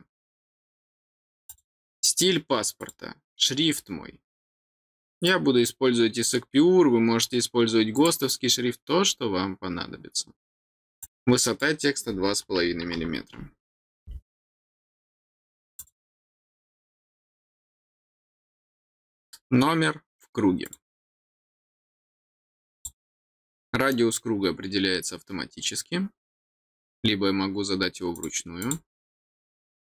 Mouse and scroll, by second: 1.4 click, 2.8 click, 3.7-4.4 scroll down 3, 5.2-7.2 drag, 7.9 click, 11.0 click, 15.7 click, 20.6 click, 22.7 click, 28.1 click, 28.6 click.